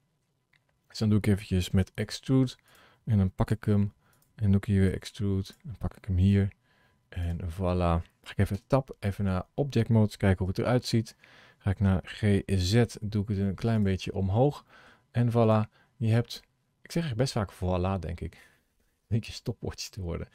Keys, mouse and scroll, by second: 0.6 scroll up 1, 1.8 e, 3.4 g, 4.9 e, 6.3 g, 8.4 Tab, 8.9 middle click, 10.0 scroll down 2, 10.7 shift+middle click, 12.0 g, 13.9-14.3 scroll down 4, 14.2 scroll up 4, 14.5 middle click, 15.1 scroll down 2, 15.3 click, 15.7 scroll down 2, 16.3 middle click.